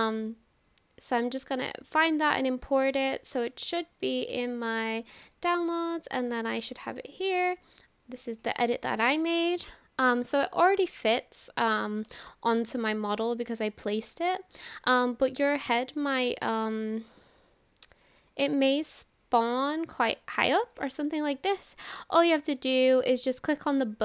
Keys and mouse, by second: 9.8-10.4 shift+drag, 10.7 shift+drag, 11.1 click, 12.2-12.5 shift+drag, 13.0-13.8 drag, 14.0 shift+click, 14.4-14.9 drag, 15.7 click, 16.2 click, 17.9 click, 19.3-20.4 drag, 20.7 click, 21.1-23.0 middle drag, 22.3-23.0 drag, 23.7 click.